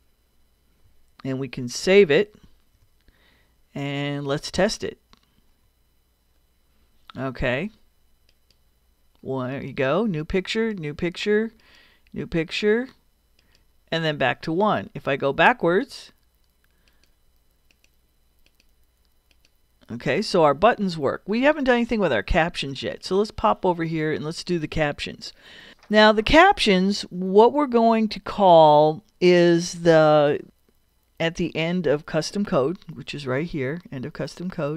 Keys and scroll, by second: 2.4 super+s, 5.1 super+Return.